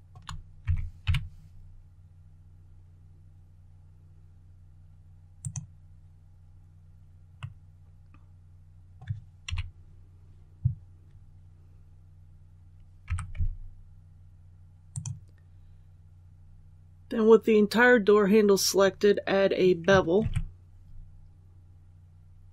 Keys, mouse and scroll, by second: 0.5 shift+s, 0.9 shift+y, 5.3 click, 7.3 middle click, 7.4 scroll down 1, 8.8 scroll up 1, 9.4 KP_1, 13.0-13.3 typing, 14.8 click, 20.1 ctrl+b.